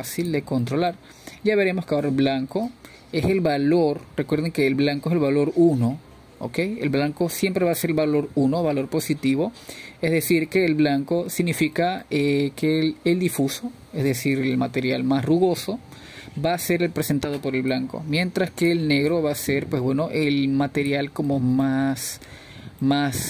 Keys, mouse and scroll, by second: 3.5 click, 3.9-4.5 middle drag, 4.5-5.1 scroll up 3, 5.1-14.7 middle drag, 14.7-15.1 scroll down 1, 15.1-21.1 middle drag, 15.6-15.9 scroll up 2, 16.7-17.5 scroll down 1, 21.1-23.2 drag.